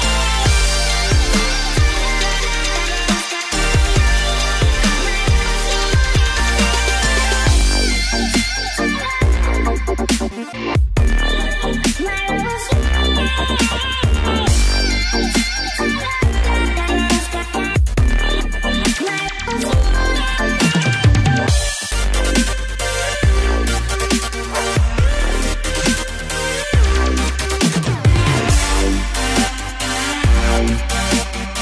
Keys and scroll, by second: 13.0 ctrl+=, 13.2 ctrl+=, 26.0 ctrl+c, 26.2 ctrl+f.